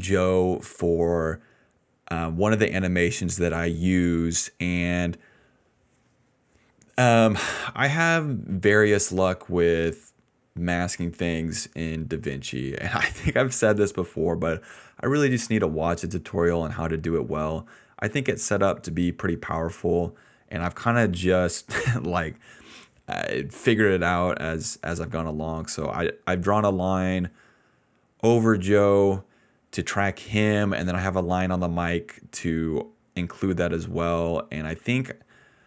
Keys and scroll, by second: 7.1 ctrl+z, 8.5 ctrl+z, 8.8 ctrl+z, 10.0 ctrl+z, 10.7 ctrl+z, 15.8 ctrl+z, 15.9 ctrl+z, 16.1 ctrl+z, 18.3 ctrl+z, 27.5-28.6 typing.